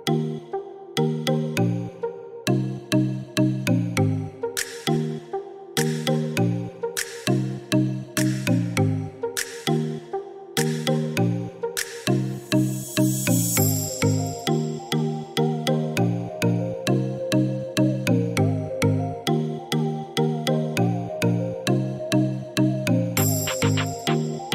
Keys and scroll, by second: 10.0 8, 10.8 4, 11.7 Return, 17.5 1, 17.6 2, 17.7 Return.